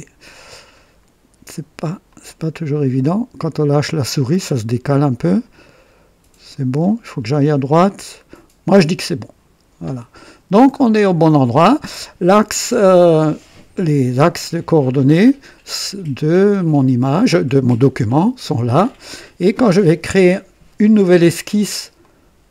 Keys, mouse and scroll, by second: 0.2-0.9 scroll down 2, 2.0 click, 4.9-5.6 scroll up 4, 6.5 scroll up 2, 8.5-8.9 scroll down 2, 9.7 click, 10.5-11.2 scroll down 3, 22.0 click.